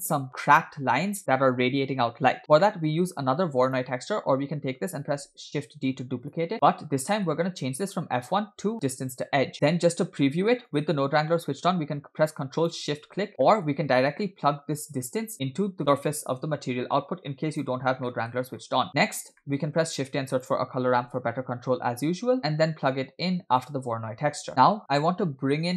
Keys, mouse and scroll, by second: 2.4-2.8 scroll down 2, 2.6 middle click, 3.0-3.7 scroll up 1, 3.7 scroll up 1, 3.7 click, 5.0 shift+d, 6.5 middle click, 7.1-7.9 scroll up 2, 7.2 middle click, 7.9-9.1 drag, 10.1-10.7 scroll down 1, 10.7 scroll down 1, 10.7 click, 12.8 ctrl+shift+click, 13.3 scroll down 1, 13.5 middle click, 14.8-17.5 drag, 18.1 middle click, 18.5-19.4 scroll up 5, 18.9 middle click, 19.4 scroll down 1, 19.4 middle click, 19.7 shift+a, 24.5 click, 25.6-25.7 scroll up 4.